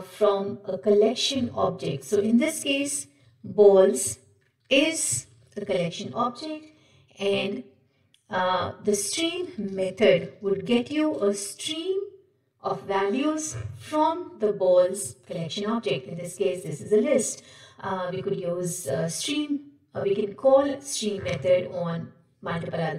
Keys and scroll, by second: 9.7 ctrl+shift+Left.